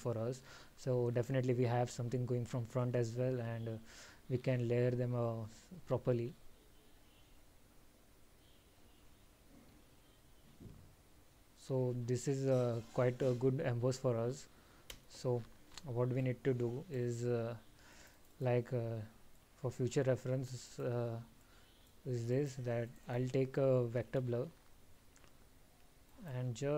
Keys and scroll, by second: 16.3 alt+?, 21.2 alt+?.